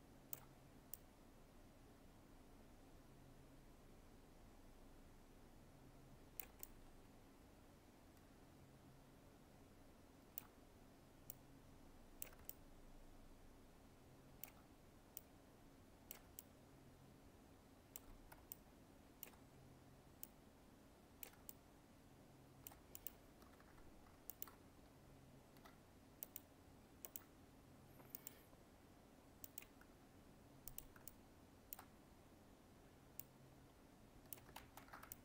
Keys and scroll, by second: 34.5 ctrl+z.